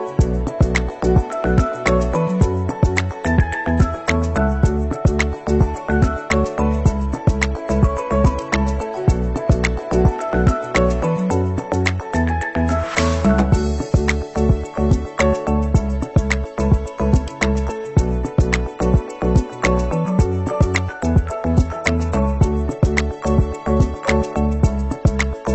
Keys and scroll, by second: 11.9 ctrl+-, 13.0 ctrl+=, 18.0 Down, 20.5 ctrl+0, 24.8 ctrl+c, 25.1 ctrl+v.